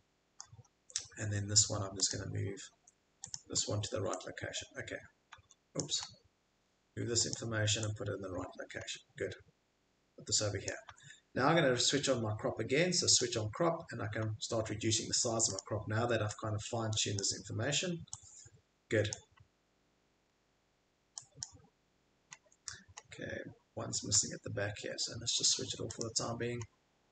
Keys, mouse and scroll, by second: 0.6 click, 0.6 middle click, 0.6 middle click, 0.7 middle click, 1.0 middle click, 2.1 middle click, 2.1 click, 2.7 Escape, 3.3 click, 3.5-4.1 scroll, 5.3 Escape, 5.8 click, 6.0 scroll, 7.3 middle click, 7.3 click, 8.3 middle click, 8.8 middle click, 8.9 middle click, 10.3 middle click, 10.7 click, 10.9 Escape, 11.1 scroll, 11.3 middle click, 13.1 click, 13.1 scroll, 13.8 scroll, 15.6 scroll, 16.0 middle click, 17.1 click, 19.1 click, 19.4 middle click, 20.3 middle click, 21.4 click, 21.4 middle click, 22.4 middle click, 23.0 middle click, 24.1 Escape, 25.9 click, 26.6 middle click.